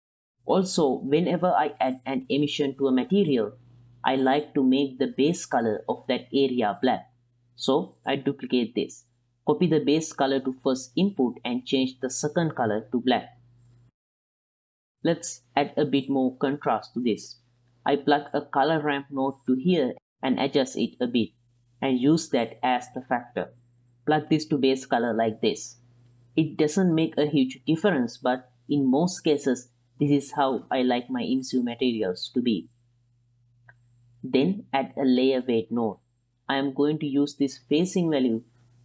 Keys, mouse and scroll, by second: 4.3 click, 5.0 drag, 5.4 click, 5.9 click, 6.3 click, 6.6 click, 6.9 click, 8.1 ctrl+shift+d, 10.4 ctrl+c, 10.9 ctrl+v, 11.9 click, 14.1 ctrl+shift+click, 17.9 middle click, 18.5 click, 19.1 click, 19.1 q, 20.2-21.9 drag, 22.3-22.7 drag, 22.9 ctrl+shift+click, 23.2-23.7 middle drag, 24.6-25.3 drag, 25.7 middle drag, 26.7 ctrl+shift+click, 28.4-28.8 middle drag, 30.1 click, 30.2 click, 31.5-32.6 drag, 34.4 shift+a, 37.2 ctrl+shift+click.